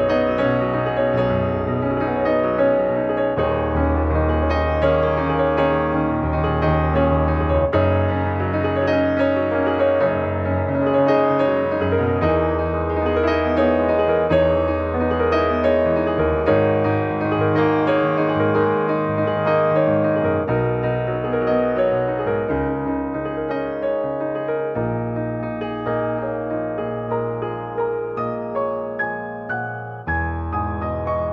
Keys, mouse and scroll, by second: 1.4 middle click, 1.6-2.0 scroll up 2, 2.0 shift+middle click, 2.3 right click, 3.2 click, 4.4 ctrl+1, 6.0 click, 6.4 middle click, 6.9 click, 7.1 shift+middle click, 7.3 scroll up 1, 7.5 middle click, 7.8 s, 15.2 click, 15.4 scroll down 1, 15.5 middle click, 16.0 scroll down 1, 16.2 middle click, 16.8 ctrl+s, 16.9 middle click, 17.3 shift+scroll up 1, 17.5 middle click, 18.0 scroll up 2, 18.3 middle click, 18.7 ctrl+s, 19.9 middle click, 20.6 click, 21.7 scroll down 2, 21.8 middle click, 22.4 scroll up 2, 22.6 middle click, 23.2-23.5 scroll up 1, 23.5 middle click, 23.9 ctrl+s, 24.0 scroll down 3, 24.3-26.3 middle drag, 26.3 click, 26.8 middle click, 27.3-27.8 scroll up 2, 27.8 middle click, 28.2 ctrl+s.